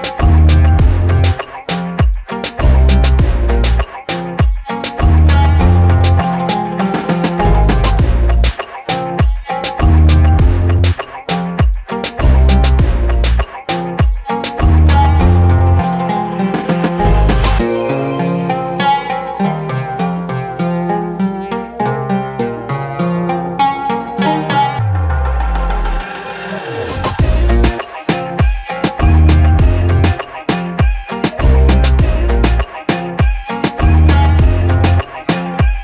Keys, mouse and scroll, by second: 0.2 scroll down 2, 0.5 alt+middle click, 3.0 right click, 3.8 click, 4.5 middle click, 4.5 scroll up 2, 4.6 middle click, 4.8 alt+click, 5.1 alt+click, 5.8 alt+middle click, 7.0 click, 8.5 click, 10.8 click, 11.4-12.5 drag, 12.8-13.5 drag, 13.7 click, 14.5 click, 15.5 click, 16.0 alt+click, 16.9 alt+click, 17.6 alt+click, 18.1 alt+middle click, 18.3 scroll down 1, 18.6-19.0 drag, 19.1 scroll down 1, 19.1-19.5 scroll up 2, 19.6 alt+middle click, 19.8 alt+click, 20.5 click, 22.0 click, 22.4 alt+click, 22.8 scroll up 1, 23.1 scroll down 1, 23.3 alt+click, 23.8 alt+drag, 24.3 alt+middle click, 24.6 scroll down 1, 25.1 click, 25.4 alt+click, 26.1 shift+right click, 27.1 scroll down 4, 27.3 alt+click, 27.9 alt+middle click, 28.2 scroll up 2, 29.0 click, 29.7 scroll down 1, 30.6 click, 32.8 alt+click, 33.6 shift+right click, 34.7 scroll up 5, 35.0 alt+click, 35.6 scroll down 2.